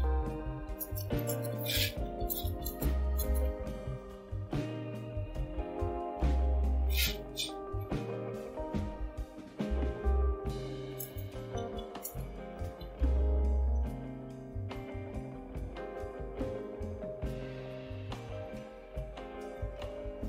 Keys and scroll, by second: 0.0-4.9 typing, 7.7-9.3 typing, 10.4-16.7 typing, 18.5-20.2 typing.